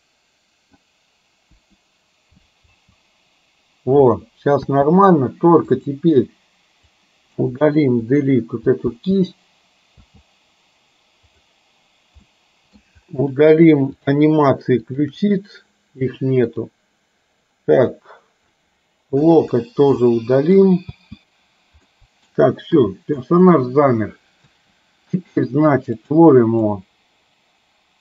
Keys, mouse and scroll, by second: 1.6 Delete, 2.8 space, 4.6 space, 5.9 click, 7.0-7.4 drag, 8.0 Delete, 8.9 space, 10.1 space, 11.3 click, 12.4-12.8 middle drag, 14.0 click, 14.9 shift+click, 17.9-18.5 drag, 19.3 Delete, 20.1-20.6 middle drag, 20.9 space, 22.0 middle drag, 22.9 KP_3, 24.5 space, 26.1 click, 26.8-28.0 drag.